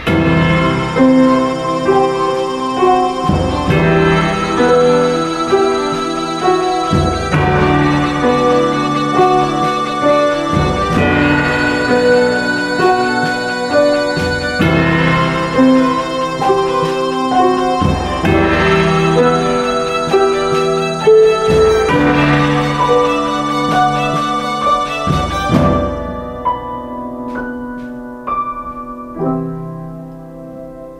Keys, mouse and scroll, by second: 19.0 ctrl+space, 20.3 ctrl+space, 24.1 x, 24.6 ctrl+space.